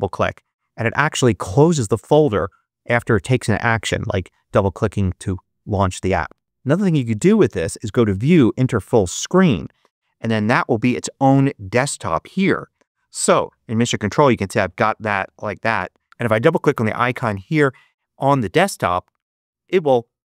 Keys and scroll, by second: 13.4 ctrl+Up.